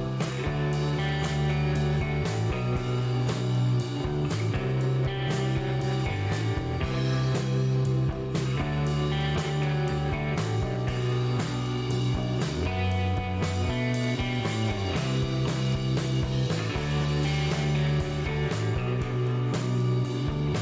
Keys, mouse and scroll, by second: 0.1 click, 0.9 click, 2.0 KP_2, 2.3 KP_Enter, 3.9 shift+right click, 5.1 shift+middle click, 5.5 shift+right click, 6.9 click, 9.0 click, 10.3 KP_2, 10.5 KP_0, 11.6 KP_Enter, 13.4 shift+right click, 14.4 shift+middle click, 14.9 shift+right click, 17.9 click, 18.3 space.